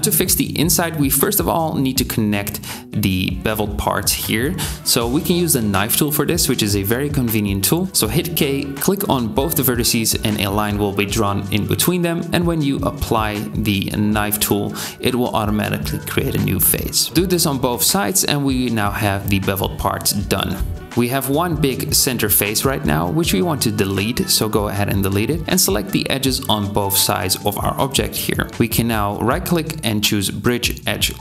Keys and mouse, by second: 0.0-9.7 drag, 6.6 k, 11.2 k, 20.9 x, 23.8 2, 28.2 ctrl+middle click.